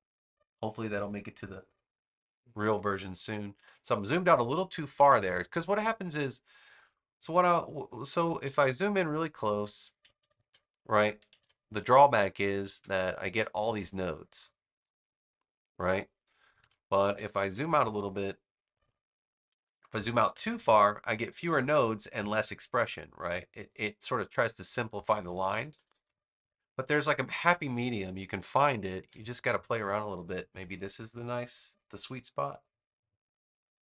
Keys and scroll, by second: 3.5 super+z, 8.3 super+=, 10.1 super+=, 11.3 =, 11.9 space, 16.5 super+z, 17.1 super+-, 20.2 -, 25.4 super+=, 27.2 super+z, 28.4 super+-.